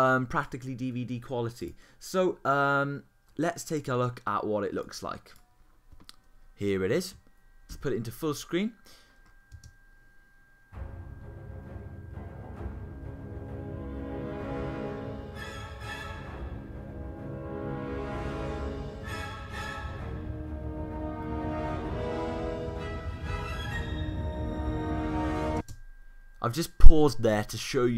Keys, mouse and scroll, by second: 7.7 super+f.